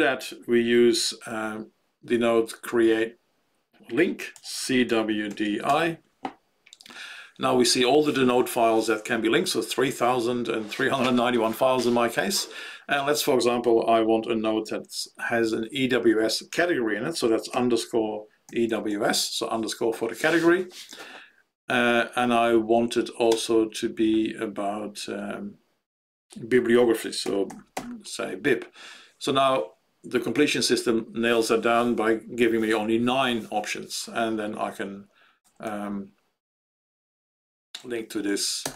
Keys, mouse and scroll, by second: 17.5-19.3 typing, 23.2 space, 27.0-28.2 typing, 35.4 Down, 35.6 Down, 37.7 Down.